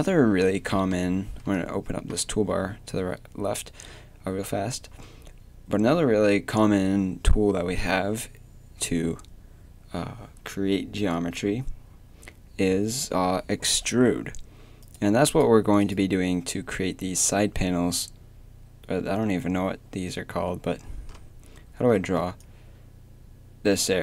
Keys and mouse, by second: 1.0 t, 14.8-19.1 middle drag, 22.2 d.